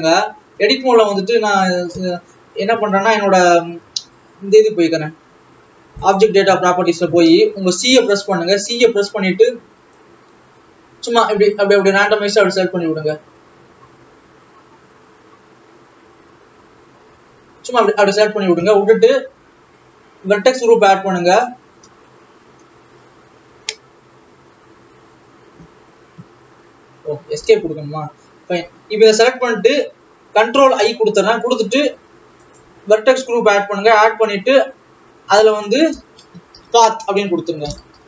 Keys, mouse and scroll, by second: 1.0 alt+a, 1.7 click, 7.0 alt+a, 10.1 c, 30.3 ctrl+i, 32.6-35.5 drag, 35.5-38.0 drag.